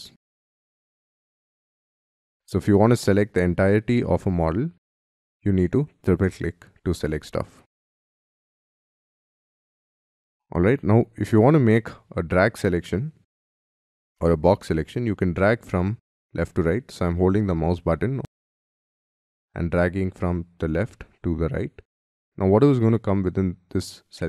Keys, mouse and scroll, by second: 2.4 scroll down 6, 5.4 double click, 5.6 double click.